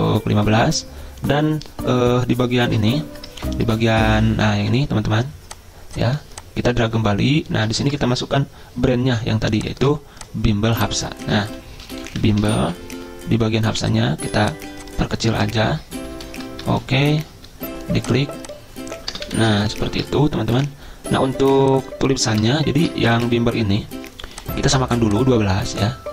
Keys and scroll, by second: 9.8 ctrl+a, 11.6-13.1 typing, 15.6 ctrl+shift+Left, 15.9 ctrl+shift+Left, 16.0 ctrl+shift+Left, 16.8 shift+Right, 17.1 shift+Right, 19.1 BackSpace, 19.3 Delete, 19.7 ctrl+shift+Left, 20.6 Delete, 22.4 BackSpace, 22.8 BackSpace, 23.2 ctrl+a.